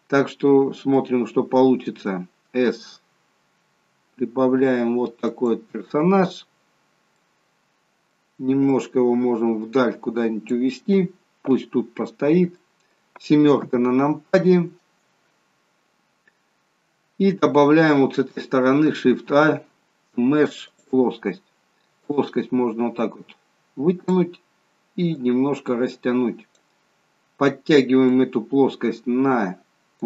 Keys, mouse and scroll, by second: 1.6 s, 6.8 scroll down 2, 7.1 middle click, 8.6 click, 11.9-12.6 scroll up 3, 12.6 middle click, 13.5 KP_7, 14.8-16.2 scroll down 9, 16.2-16.8 scroll up 4, 17.2 scroll up 2, 19.2 shift+a, 22.0 click, 28.1 click.